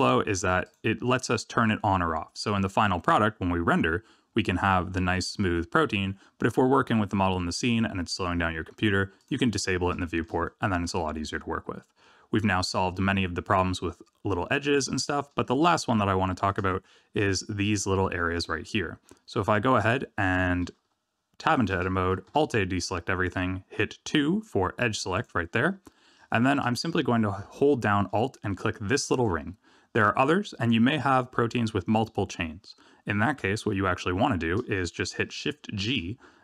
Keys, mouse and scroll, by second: 0.5 click, 2.4-3.6 scroll down 1, 3.6-5.6 scroll down 2, 6.7 middle click, 9.1 click, 9.9 shift+middle click, 10.4 middle click, 12.8 middle click, 15.9 shift+middle click, 18.8-19.3 scroll down 1, 19.3 Tab, 22.2 alt+a, 25.1 click, 25.6-26.1 scroll up 3, 26.2 shift+middle click, 29.0 alt+click, 30.7-32.2 scroll down 4, 32.2-32.5 scroll down 1, 32.5 scroll up 1, 33.3 scroll up 2, 35.8 shift+g.